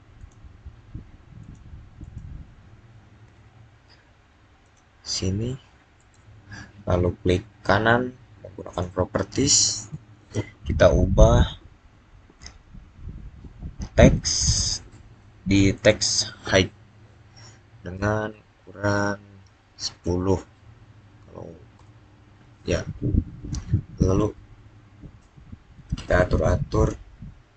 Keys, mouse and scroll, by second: 4.5 click, 5.9 right click, 8.5 right click, 13.8-15.5 scroll down 1, 15.6 click, 19.4-20.4 typing, 21.6 Return, 24.8 Return.